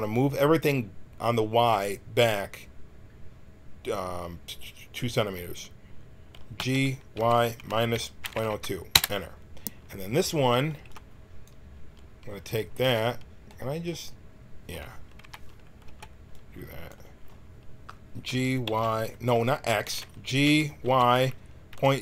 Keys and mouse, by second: 6.5 g, 10.2 a, 10.7 b, 12.8 a, 15.2 KP_1, 15.8 b, 18.2 g, 20.4 g.